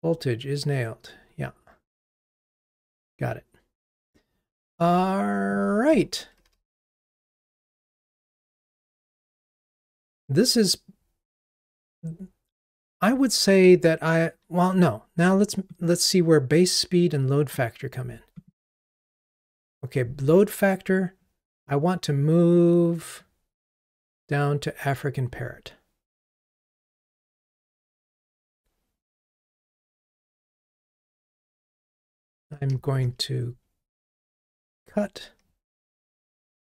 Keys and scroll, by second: 6.5 ctrl+r, 18.5 super+b, 30.0 alt+Up, 32.6 super+x.